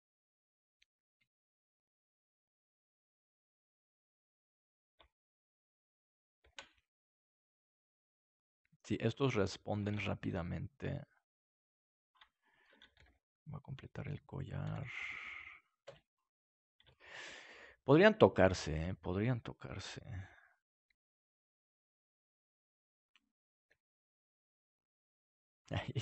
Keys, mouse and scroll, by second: 6.4 shift+d, 9.1-10.6 drag, 10.2 shift+d, 10.7 click, 10.8 right click, 12.3-13.3 drag, 12.3 middle click, 12.9 shift+d, 14.7 shift+d, 16.9 middle click, 18.8 right click, 19.6 g, 23.0-24.1 drag, 24.1 g, 25.5 click, 25.8-26.0 right drag.